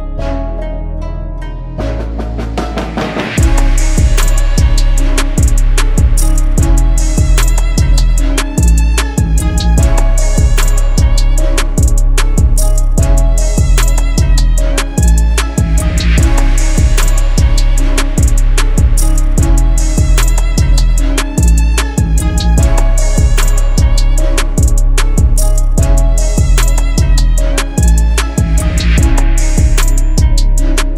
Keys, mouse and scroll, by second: 8.1 double click, 16.2 ctrl+z, 22.9-24.8 scroll up 1, 26.8 e.